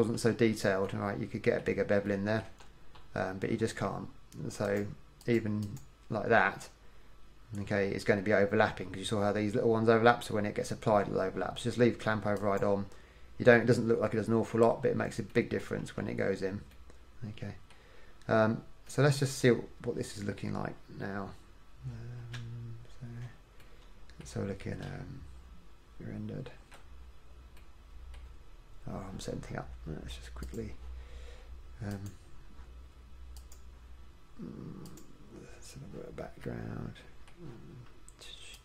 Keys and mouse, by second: 0.3 KP_1, 2.4-3.5 middle drag, 4.8-7.7 middle drag, 12.5-15.1 middle drag, 15.2 middle click, 16.1 KP_1, 18.2-19.3 middle drag, 22.5 Tab, 23.9-25.1 middle drag, 25.1 z, 27.3 middle click, 29.9 middle click, 30.7-32.5 drag.